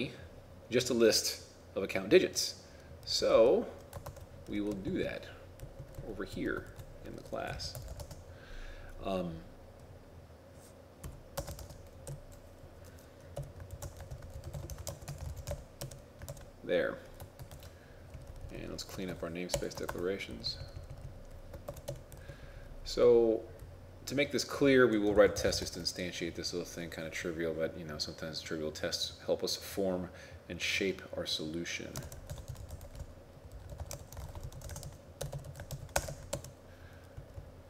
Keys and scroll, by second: 4.1 ctrl+Tab, 6.7 ctrl+Right, 11.7 shift+space, 13.9 shift+space, 14.2 shift+l, 14.9 shift+a, 17.6 ctrl+shift+s, 19.9 ctrl+Tab, 32.1 shift+c, 32.5 shift+i, 34.0 shift+t, 34.5 shift+9, 35.8 shift+0.